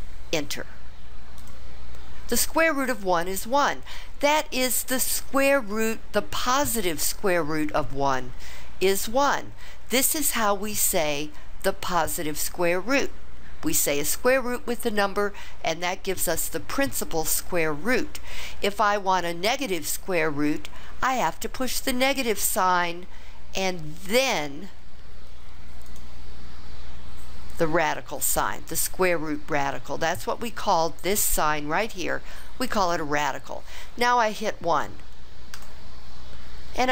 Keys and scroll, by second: 1.4 Return, 35.5 1.